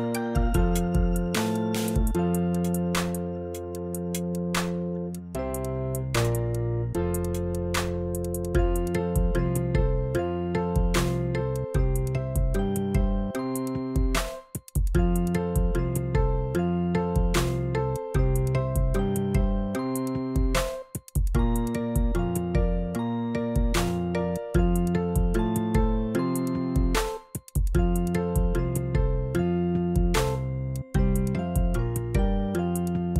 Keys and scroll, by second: 2.1 b, 2.8 ctrl+alt+b, 11.6 x, 29.4 v.